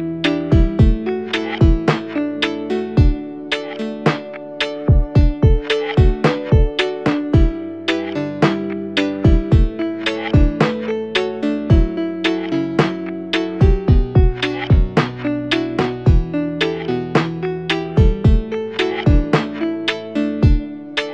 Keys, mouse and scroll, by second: 1.3 u, 6.3 =, 6.5 =, 17.0 ctrl+z.